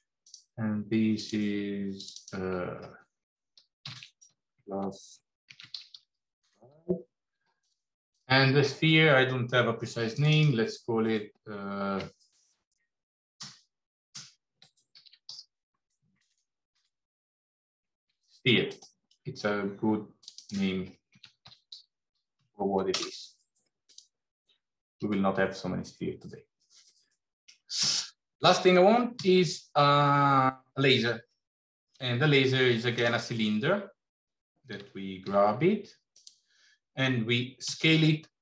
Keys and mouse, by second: 1.1 click, 2.1-8.7 drag, 4.5 s, 10.2-18.7 drag, 16.1 BackSpace, 20.1-23.5 drag, 23.7 click, 27.1 middle click, 29.0 shift+a, 34.6 g, 37.5 s.